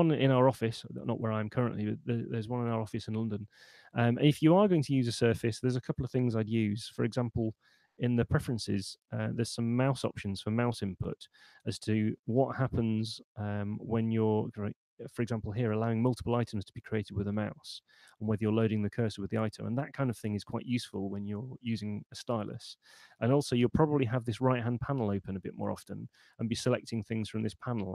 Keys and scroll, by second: 6.3 super+,, 22.6 Home, 24.0 super+9.